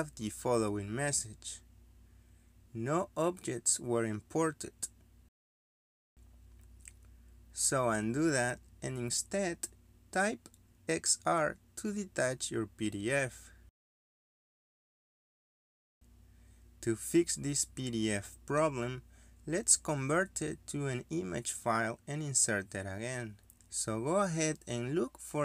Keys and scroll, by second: 0.9 Escape, 13.5 Escape, 13.8-14.7 typing, 14.8 Return.